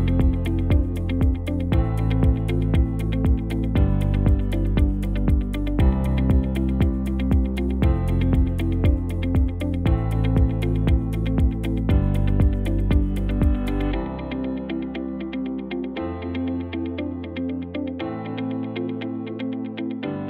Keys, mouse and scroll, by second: 5.5 KP_7, 19.4 KP_7.